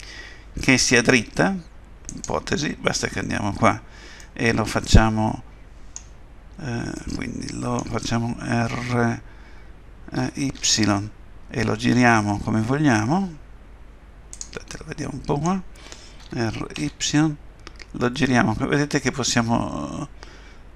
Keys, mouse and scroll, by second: 2.1 click, 4.2 middle click, 7.0 middle click, 10.2 r, 14.7 middle click, 16.2 r.